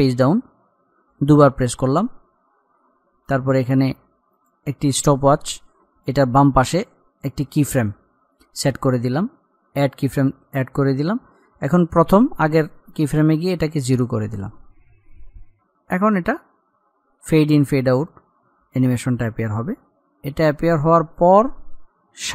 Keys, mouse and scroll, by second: 0.1 shift+Page_Down, 4.5 click, 12.2 click.